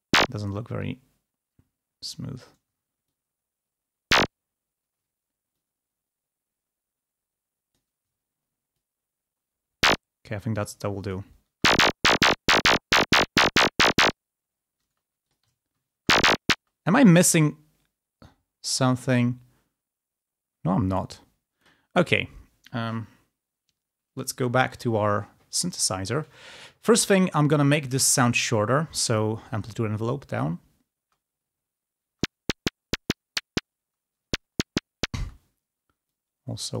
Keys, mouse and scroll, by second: 0.7-2.5 ctrl+drag, 3.0-4.3 ctrl+drag, 4.4 ctrl+scroll down 2, 4.6 ctrl+scroll up 2, 5.5-7.9 drag, 8.7-10.0 ctrl+drag, 10.0 ctrl+scroll down 2, 11.0 ctrl+click, 11.5 ctrl+space, 14.8 space, 15.2 ctrl+click, 15.5 ctrl+scroll up 1, 15.9 space, 17.2-21.1 drag, 21.5 click, 23.9 click, 24.5 click, 29.4-30.5 drag, 30.9 space, 32.0 space, 33.7 space, 35.1 space, 36.0 click.